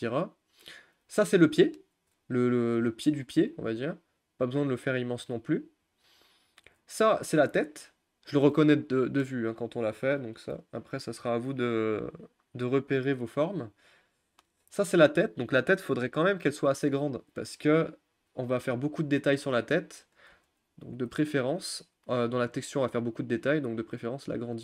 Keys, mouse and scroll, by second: 0.5 click, 1.7-3.7 shift+middle drag, 3.7 g, 6.0 click, 7.2-9.6 middle drag, 9.6-10.0 scroll up 2, 10.0-12.3 middle drag, 12.3 scroll up 1, 12.6-15.8 middle drag, 15.8 scroll down 2, 16.0-16.4 scroll up 1, 16.4-18.2 middle drag, 18.2 r, 20.4 g.